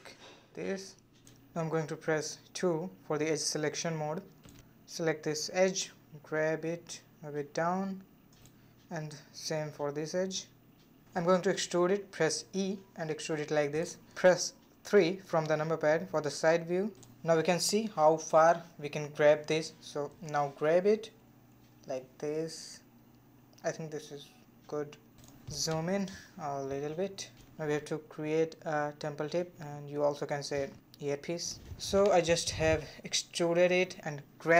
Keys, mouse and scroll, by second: 1.7 scroll up 2, 1.9-3.9 middle drag, 3.9 2, 4.5 click, 5.9 g, 9.0 click, 9.3 g, 11.0 3, 11.2 click, 11.6 scroll down 2, 11.8 middle click, 12.7 e, 14.0 scroll down 2, 14.2 middle click, 15.1 KP_3, 16.2-16.6 scroll down 2, 16.6-18.9 shift+middle drag, 18.9 g, 25.0 shift+middle click, 25.3-25.7 scroll up 3, 25.7-27.0 shift+middle drag, 27.0 e, 28.5 g.